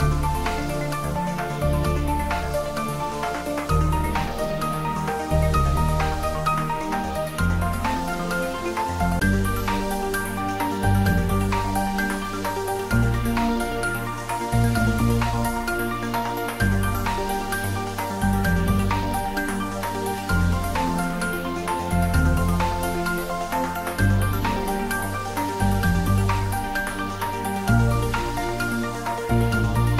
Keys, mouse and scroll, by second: 3.2-5.4 drag, 9.1-10.7 drag, 14.1-15.4 drag, 18.0-18.6 click, 19.0-20.3 drag, 21.0-22.3 drag, 23.1-24.5 scroll up 1, 24.5-25.4 drag, 25.8 scroll down 1, 28.0 scroll down 1, 28.4-29.3 middle drag.